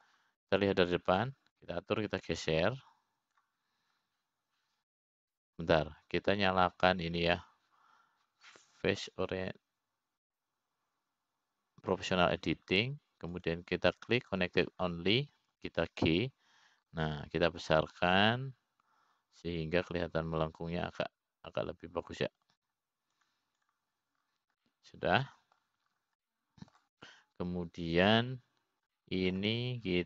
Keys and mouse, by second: 0.1 middle click, 1.3 click, 2.1 middle click, 4.7-6.1 drag, 8.0 ctrl+z, 11.7 click, 15.9-17.3 drag, 18.4 g, 27.2-28.2 middle drag, 28.8 middle click, 29.5 click.